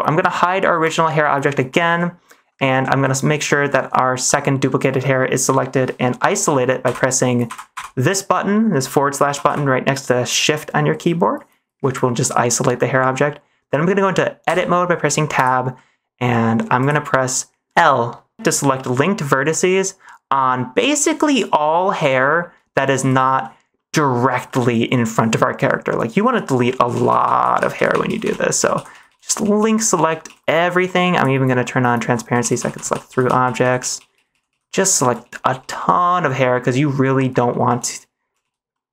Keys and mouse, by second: 0.7 click, 1.4 shift+middle click, 4.2 middle click, 6.8 /, 7.4 /, 7.6 /, 9.2 /, 9.4 /, 12.1 middle drag, 14.4 Tab, 15.3 click, 15.7 middle click, 16.7 click, 21.5-23.1 typing, 23.3 middle click, 24.4 middle click, 25.5 middle click, 26.7-30.1 typing, 28.2 middle click, 31.4 middle click, 32.2-38.9 typing, 38.6 middle click.